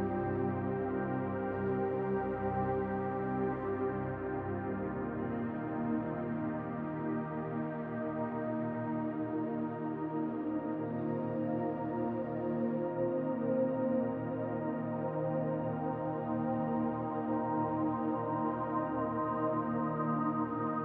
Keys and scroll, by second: 11.5 BackSpace, 11.6 y, 11.7 Return, 14.0-15.2 typing, 19.4-20.5 typing.